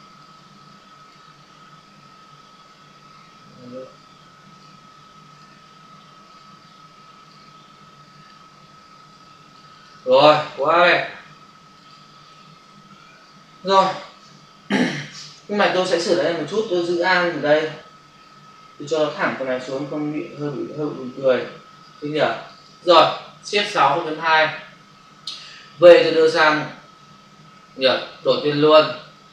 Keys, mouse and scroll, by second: 0.0 click, 0.9 click, 2.4 Delete, 4.6 click, 5.3 double click, 6.2 click, 7.1 click, 8.9 click, 9.1 double click, 9.4 click, 9.7 double click, 9.9 click, 11.6 click, 12.8 ctrl+0, 20.2 alt+click, 22.0 click, 22.2 double click, 22.3 click, 22.6 double click, 23.7 shift+F6, 24.2 Return, 24.9 v, 25.9 click.